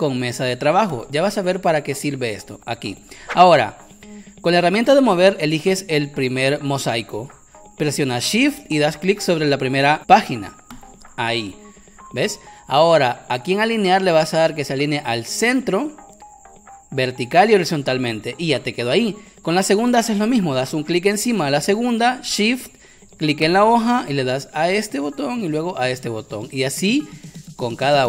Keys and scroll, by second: 27.0 Caps_Lock.